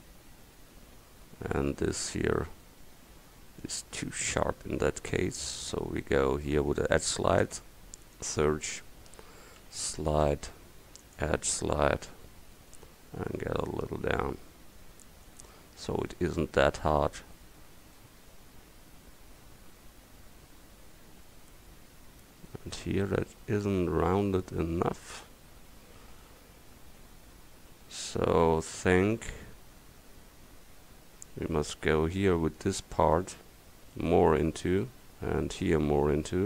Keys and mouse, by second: 1.0 middle click, 1.2-3.6 middle drag, 5.2-7.5 drag, 7.5 space, 17.6 Tab, 19.9 middle click, 20.5 middle click, 20.9 middle click, 21.3 middle click, 24.2 Tab.